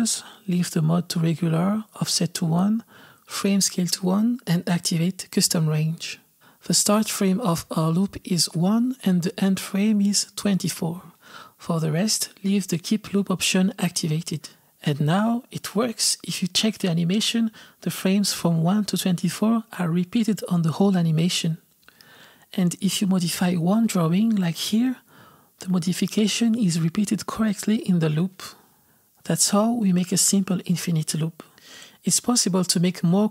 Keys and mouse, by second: 5.6 click, 8.3-11.3 drag, 11.4-18.0 drag, 23.4 click, 24.6-31.6 drag, 32.2 click.